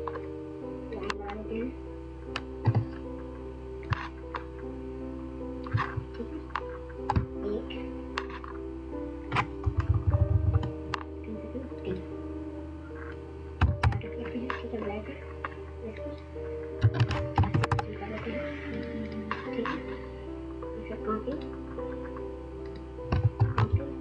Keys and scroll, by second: 9.4 Down, 9.7 Down, 13.4 typing, 16.8 ctrl+a, 16.9-17.7 typing, 23.2 ctrl+c.